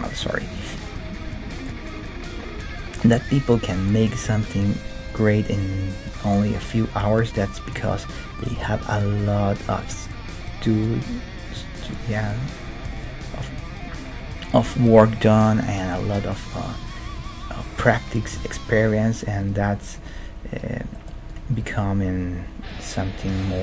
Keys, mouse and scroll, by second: 1.5-4.0 middle drag, 2.6 g, 3.4-7.5 right drag, 3.7 g, 4.6 g, 6.6 g, 7.8-9.7 right drag, 8.6 g, 12.3-14.1 right drag, 12.9 g, 16.4-18.6 right drag, 17.1 g, 19.9-23.2 right drag, 20.9-22.8 middle drag, 21.6 g, 23.5 g.